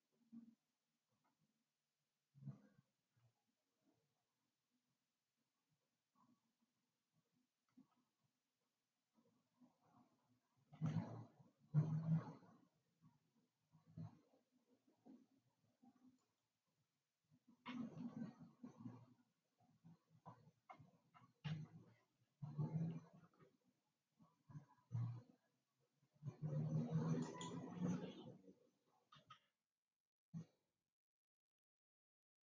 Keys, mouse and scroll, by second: 3.8 e, 8.3 s, 18.4-21.5 middle drag, 24.1 e, 29.7 s.